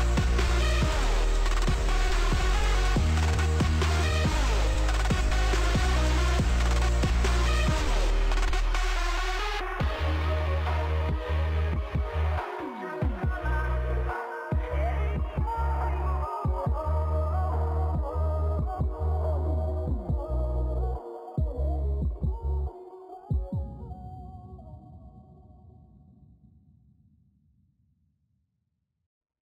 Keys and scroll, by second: 1.2 ctrl+s, 2.7 ctrl+d, 5.0 Delete, 6.0 ctrl+space, 12.0 1, 12.3 0, 13.6 ctrl+s, 21.3 space, 26.4 ctrl+s.